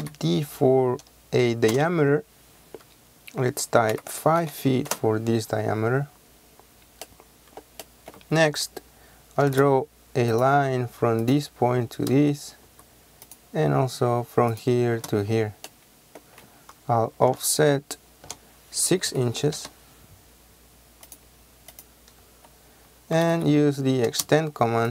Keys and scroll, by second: 0.1 d, 1.8 Return, 4.0 KP_5, 5.0 Return, 9.5 l, 9.6 space, 12.2 space, 17.4 o, 18.3 Return, 19.2 KP_6, 19.6 Return, 22.3-24.1 typing.